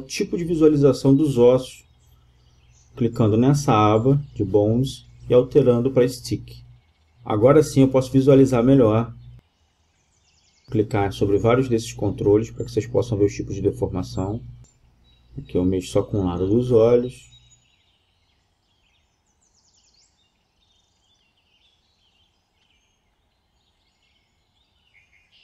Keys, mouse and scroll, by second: 7.9 a, 8.7-10.5 drag, 10.0 g, 16.1-17.8 right drag, 16.9 g, 18.6 Escape, 19.4 g, 22.7-24.4 right drag, 23.5 g, 25.1-25.4 right drag.